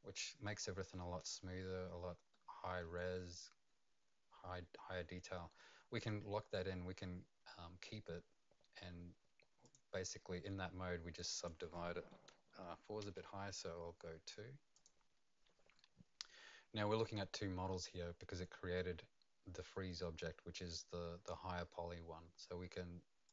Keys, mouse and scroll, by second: 2.3 middle click, 2.9 right click, 5.6 middle click, 9.6 click, 11.2 click, 13.0 KP_2, 14.7 click, 23.2 click.